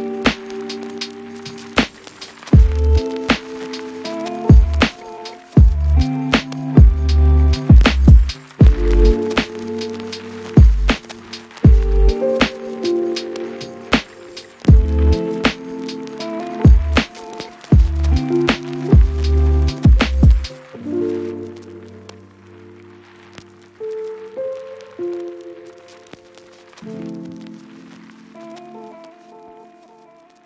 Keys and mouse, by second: 0.8-2.3 typing, 1.5 shift+click, 1.8 shift+click, 2.3 Tab, 3.9 shift+middle click, 3.9-8.5 typing, 4.3 shift+middle click, 4.7 click, 4.9-6.1 middle drag, 5.5 Tab, 6.2 shift+middle click, 6.5 Tab, 6.5 ctrl+r, 6.5 ctrl+click, 7.4 shift+click, 7.8 Tab, 8.0 shift+click, 8.7 Tab, 9.1 Tab, 9.2 shift+click, 9.5 e, 10.0 shift+click, 10.4 Tab, 10.6 KP_1, 10.8 click, 11.2 shift+click, 11.8 shift+click, 11.8-12.9 typing, 12.5 ctrl+r, 13.3 Tab, 13.4 ctrl+r, 14.2 Tab, 14.6 e, 16.0 middle click, 16.3 Tab, 16.5 a, 17.1 Tab, 17.2 shift+middle click, 19.4 Tab, 19.5-24.5 typing, 20.8 shift+middle click, 21.1 click, 21.4 Tab, 21.8 middle click, 21.8 click, 22.1 click, 22.5 shift+click, 22.8 middle click, 23.7 click, 23.9 shift+click, 24.5 click, 25.9 Tab, 26.0-27.4 typing, 26.8 shift+middle click, 27.3 shift+middle click, 28.2 ctrl+z, 28.2 ctrl+middle click, 28.6 shift+d, 29.0 shift+d, 29.4 shift+d, 29.8 shift+click, 30.2 click.